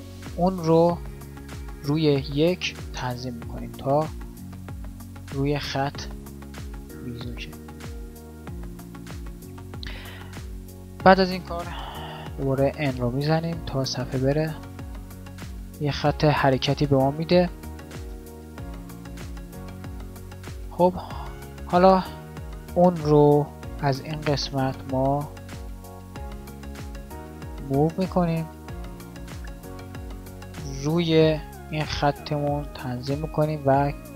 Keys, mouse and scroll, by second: 8.7-12.0 middle drag, 12.0 n, 21.8 alt+a, 31.7 g.